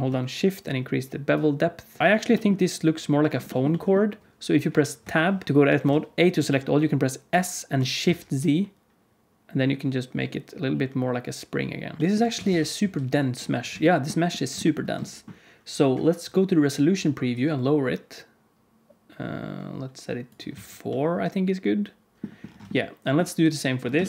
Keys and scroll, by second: 4.9 Tab, 5.7 a, 7.2 s, 12.0 shift+KP_1, 12.4 ctrl+s, 12.7 z, 20.4 z.